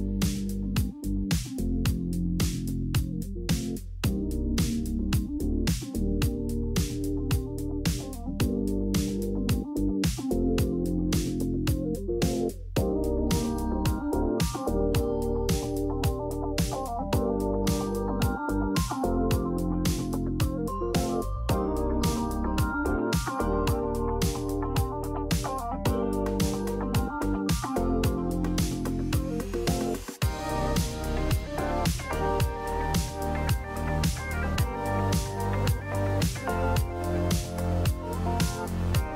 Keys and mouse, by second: 0.1 middle click, 1.1 Tab, 2.1 click, 3.3 KP_Decimal, 5.5 shift+click, 6.5 m, 9.4 shift+middle click, 10.2 middle click, 11.1 click, 12.3 KP_Decimal, 13.6 middle click, 14.1 alt+z, 14.6-16.4 middle drag, 17.1 shift+click, 18.3 ctrl+z, 18.8 click, 20.7 shift+click, 21.8 m, 23.8 alt+z, 24.7 Tab, 25.1 middle click, 25.7 middle click, 26.5 Tab, 27.6 middle click, 28.3 KP_3, 28.8 Tab, 29.9 shift+middle click, 31.3 Tab, 31.7 alt+z, 33.3 click, 34.1 alt+z, 34.4 middle click, 37.5 g.